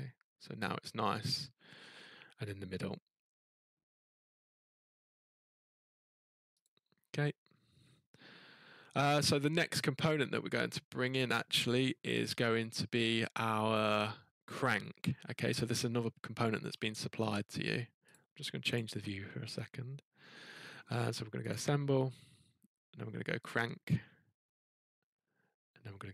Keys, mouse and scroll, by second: 3.1 scroll, 4.7-6.4 scroll, 6.6 click, 12.1-12.8 scroll, 16.3-16.6 scroll up 3, 16.6-17.0 scroll down 1, 17.0 middle click, 18.1 click, 18.7 click, 18.7-20.1 scroll, 20.1-20.5 scroll, 21.5 click, 23.5 click.